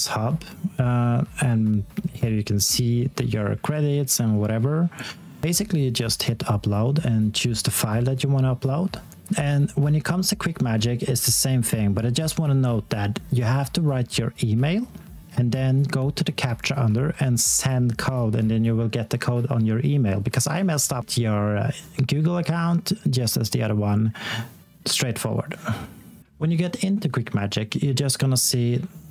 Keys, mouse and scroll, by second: 14.9 x, 16.1 alt+x, 17.2-18.4 typing, 21.0 click, 26.3 click.